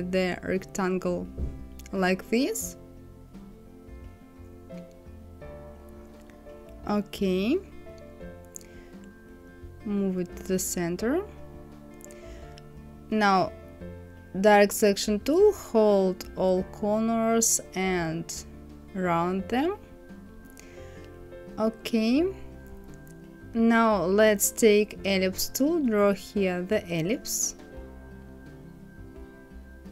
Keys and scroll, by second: 7.9 Right, 9.3 Left.